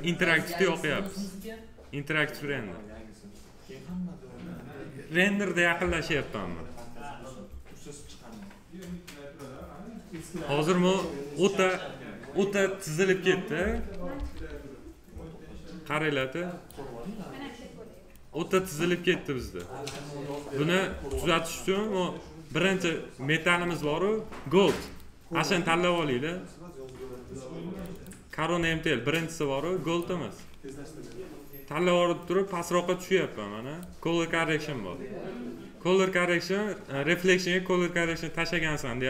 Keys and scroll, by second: 14.1 m.